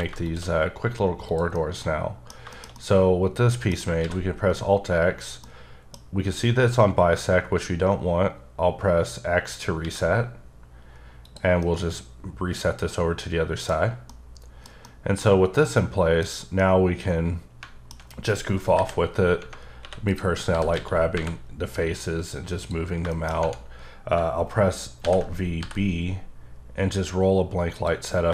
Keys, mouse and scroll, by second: 0.2 shift+click, 0.9-1.2 scroll down 1, 1.2 click, 1.5 middle click, 4.0 x, 5.4 middle click, 9.8 x, 11.2 click, 11.6 middle click, 13.8 scroll up 1, 14.1 middle click, 14.8 double middle click, 15.2 scroll down 2, 15.6 middle click, 16.6 middle click, 16.6-17.3 typing, 18.0 scroll up 2, 18.7 KP_5, 19.3 scroll down 2, 20.1 click, 20.5 g, 20.7 x, 21.1 y, 22.6 click, 23.1 middle click, 25.0 alt+v, 25.5 b, 26.4 scroll up 1, 27.7 click, 28.0-28.3 scroll down 13.